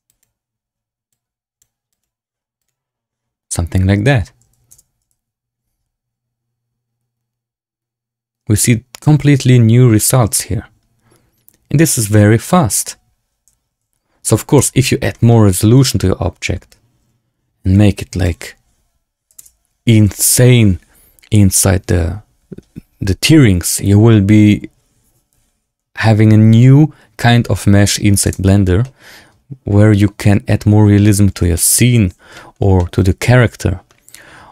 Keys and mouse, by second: 0.0 click, 1.0 click, 1.8 click, 2.6-4.2 drag, 4.6 space, 14.6 space, 15.0 shift+drag, 15.8 shift+drag, 17.6 shift+click, 19.3 space, 28.3 space, 28.7-30.4 drag, 31.5 shift+drag, 32.2 shift+drag, 32.7 click.